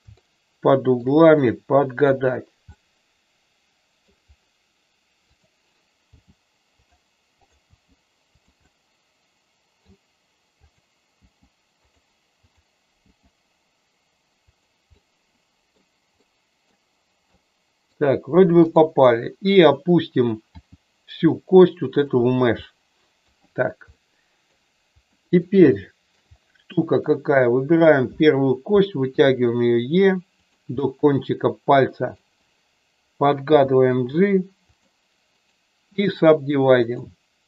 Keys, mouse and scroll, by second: 0.2 shift+middle click, 1.3 middle click, 2.7-4.0 middle drag, 5.2 click, 6.1 g, 6.8 click, 7.6 g, 8.6-9.7 middle drag, 10.6 click, 11.2 g, 11.7 click, 12.4 click, 13.0 g, 14.3 click, 15.0 middle click, 16.2 middle click, 17.3 middle click, 18.6 click, 20.5 g, 22.5 middle click, 23.9 middle click, 25.2 middle click, 25.7 shift+middle click, 26.7 middle click, 27.7 click, 29.1 e, 30.3 click, 30.8-32.2 middle drag, 33.5 g, 34.0 click, 34.6 click, 35.4 right click, 36.8-37.4 right drag.